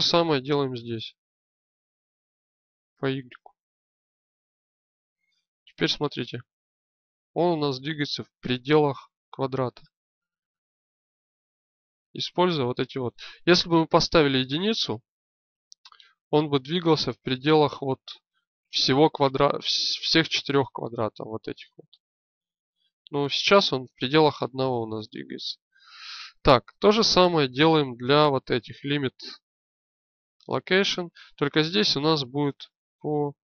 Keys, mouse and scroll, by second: 1.4 click, 6.2 g, 27.4-30.4 drag, 32.4-33.4 drag.